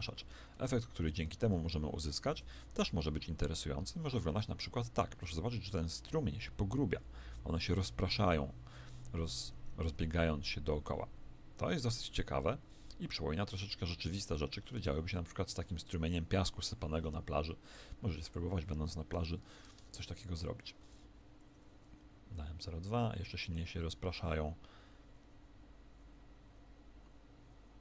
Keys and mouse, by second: 0.4 KP_1, 2.2 alt+a, 14.5 Escape, 18.1 click, 20.7 alt+a, 23.7-27.8 middle drag.